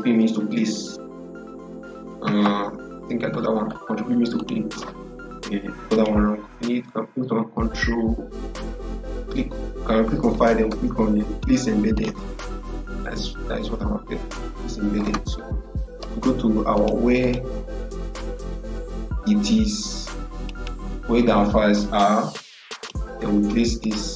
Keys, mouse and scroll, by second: 4.2 click, 11.8 click, 16.6 click, 20.3 click.